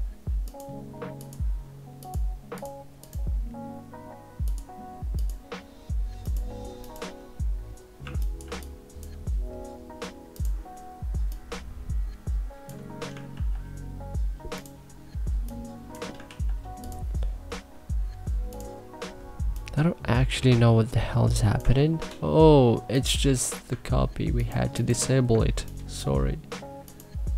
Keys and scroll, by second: 7.8 1, 8.2 3, 13.1 ctrl+z, 16.0 ctrl+z, 21.5 ctrl+z, 25.3 3.